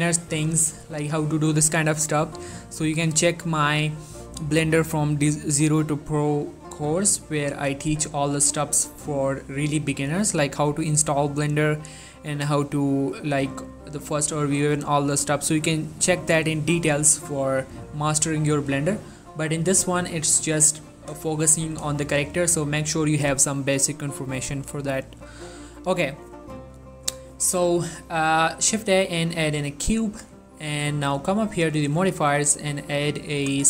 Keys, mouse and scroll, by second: 0.2-0.8 ctrl+middle drag, 0.9 shift+middle click, 7.5 middle click, 8.3 ctrl+middle click, 9.4 shift+middle click, 14.2 middle click, 14.7 shift+middle click, 15.2-18.0 middle drag, 19.1 click, 19.8 1, 20.9-21.3 scroll up 1, 21.4 shift+middle click, 22.1 shift+middle click, 22.6-23.1 scroll up 1, 28.2 shift+Num_Lock, 28.2-28.6 scroll up 1, 28.6 shift+a, 30.0 click.